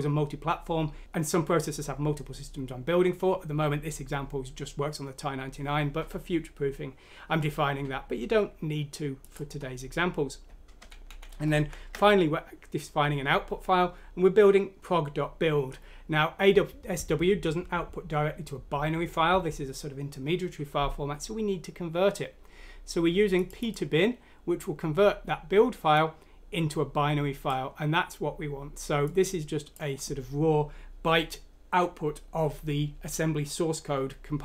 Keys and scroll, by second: 11.5 End.